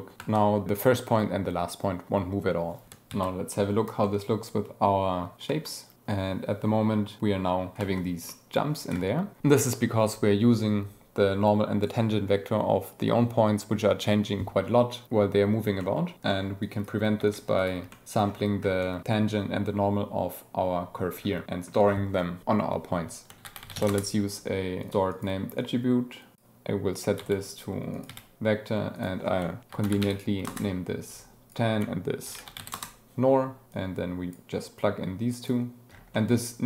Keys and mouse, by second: 0.1 space, 3.0 ctrl+x, 4.0-5.1 drag, 5.4 space, 7.6 space, 9.3 click, 15.7 click, 16.2 click, 16.6 click, 17.1 g, 17.5 click, 17.8 click, 18.7 click, 21.4 click, 23.3 shift+a, 24.7 click, 25.1 click, 25.1 shift+d, 25.5-27.2 drag, 27.8 click, 28.9-30.5 drag, 31.4-32.7 drag, 33.6-34.3 drag, 34.8-35.6 drag, 36.1 click.